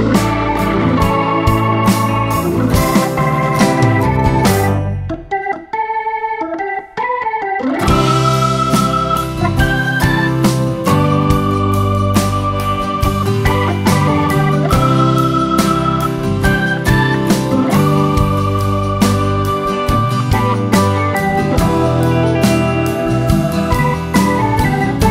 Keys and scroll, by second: 16.8 space.